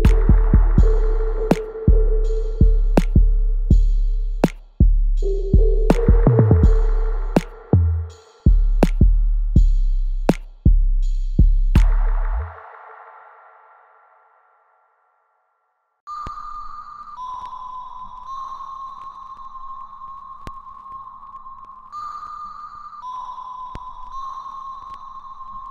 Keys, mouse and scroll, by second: 0.2 alt+click, 0.9-1.9 scroll down 1, 2.7 click, 5.6-5.9 scroll down 1, 6.4 alt+right click, 7.5-9.6 alt+drag, 9.6 click, 15.8 click, 17.2-25.7 ctrl+drag.